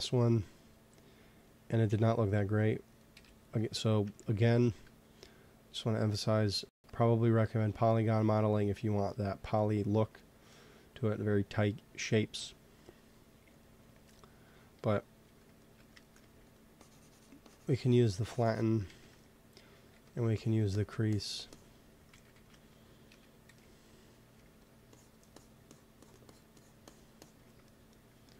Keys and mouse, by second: 0.6-4.0 drag, 3.0 KP_1, 5.7-8.3 drag, 10.1-12.2 middle drag, 12.3 t, 13.4-15.0 drag, 15.1 t, 16.1 f, 16.7-18.8 drag, 18.8 shift+c, 19.8 f, 20.2-21.5 drag, 22.0 ctrl+z, 22.3 ctrl+z, 23.0 KP_1, 23.4 x, 24.2 f, 24.8 click, 27.6-28.3 drag.